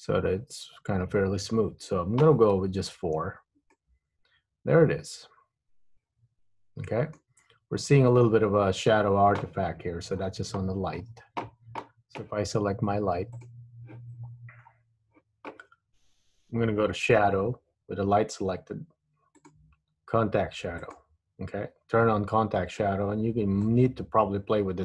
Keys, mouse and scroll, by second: 2.7 Tab, 3.1-3.4 scroll up 1, 3.4-3.8 scroll down 3, 3.8 middle click, 7.6-7.9 scroll up 1, 10.2 scroll down 6, 11.1-11.4 scroll down 4, 12.0-12.6 scroll down 1, 13.5 click, 14.4-15.6 scroll up 12, 19.5 click, 21.0 click, 22.6-23.8 scroll down 3, 23.8 click.